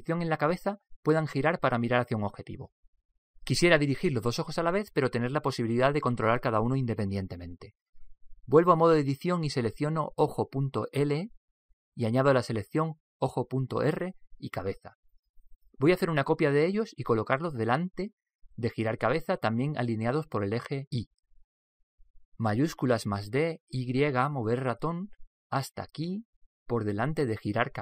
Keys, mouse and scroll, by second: 0.4-5.9 middle drag, 8.2-9.9 middle drag, 9.1 Tab, 10.7 Tab, 13.2-17.0 right drag, 23.7 shift+d.